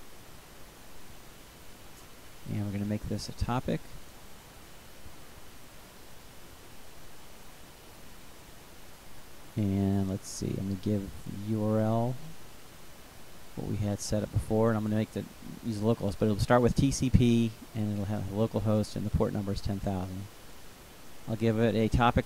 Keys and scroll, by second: 11.8 ctrl+c, 16.0 ctrl+v, 19.9-22.2 typing.